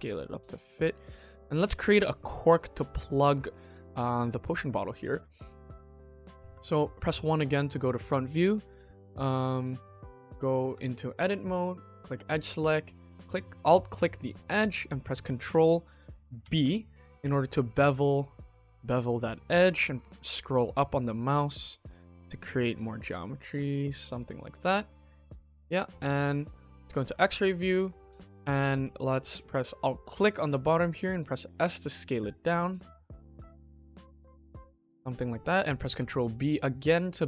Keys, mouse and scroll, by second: 1.3 middle drag, 1.8 shift+middle drag, 2.1-2.4 scroll up 3, 2.5-3.3 shift+middle drag, 3.4-4.0 scroll down 3, 4.0-4.3 scroll up 2, 4.4 shift+middle drag, 4.9 click, 5.4 KP_1, 5.8 shift+middle drag, 6.0 shift+middle click, 6.2-7.1 scroll up 3, 7.2 shift+middle drag, 10.6 Tab, 11.1 click, 11.9 click, 13.0 alt+click, 13.5 middle click, 14.1-14.9 scroll down 2, 16.3 ctrl+b, 24.1 Tab, 24.5-25.7 middle drag, 26.6 click, 27.2 middle click, 27.6 KP_1, 27.9 Tab, 28.3 shift+middle click, 28.5-29.0 scroll up 2, 29.9 alt+click, 31.5 5, 35.8 ctrl+b.